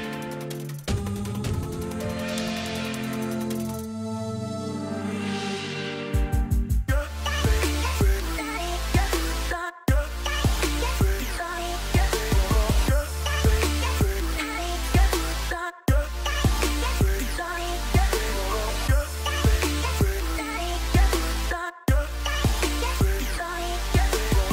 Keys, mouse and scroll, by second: 0.7 right click, 8.3 right click, 10.2 right click, 18.7 right click.